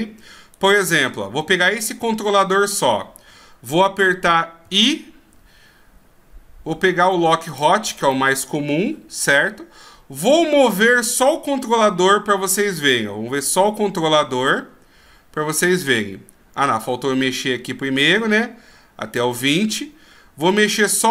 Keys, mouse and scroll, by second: 0.6 right click, 4.6 i, 8.1 middle click, 12.0 KP_3, 13.4 g, 17.3 click, 20.8 g.